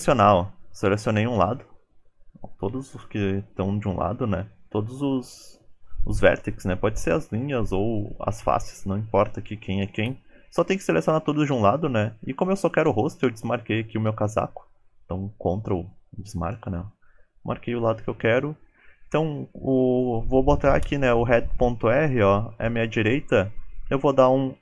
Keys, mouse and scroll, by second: 0.9 scroll up 6, 1.7 shift+click, 2.4 shift+middle click, 2.7 shift+click, 3.3 shift+middle click, 3.9 shift+middle click, 4.1 scroll down 3, 4.3 ctrl+click, 12.0 ctrl+click.